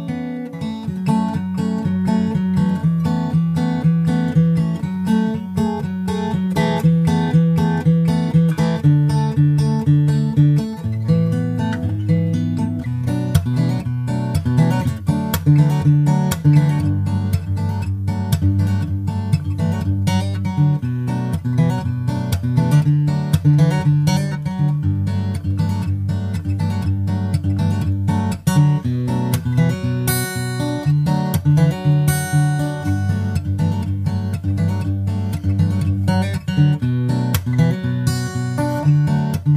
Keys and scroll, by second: 4.6 super+Right, 6.5 super+Right, 13.6 super+Right, 20.3 super+Right, 38.6 super+Right, 39.0 super+s, 39.2 super+Tab.